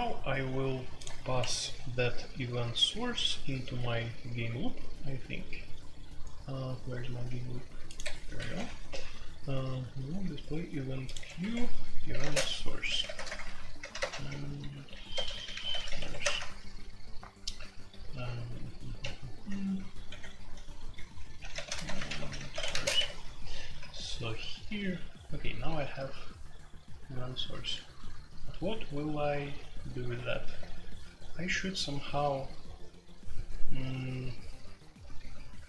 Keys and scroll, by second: 1.3 Escape, 8.0 Escape, 8.3 typing, 11.3 Escape, 12.1-24.2 typing, 25.6-26.7 typing, 32.6 typing, 34.2-34.7 typing.